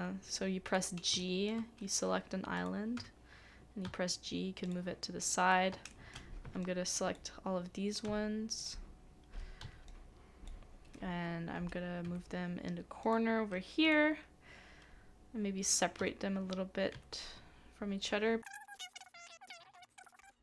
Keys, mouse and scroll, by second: 1.2 shift+middle click, 5.7 typing, 5.9 shift+middle click, 16.0-16.9 typing, 18.7 typing.